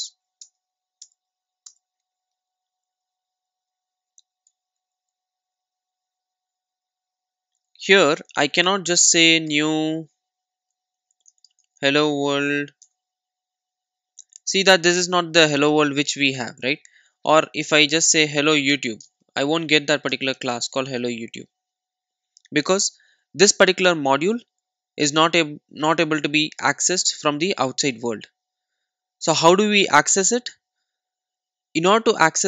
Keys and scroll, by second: 0.5 alt+Return, 4.5 Delete, 13.0 Return, 17.8 super+z.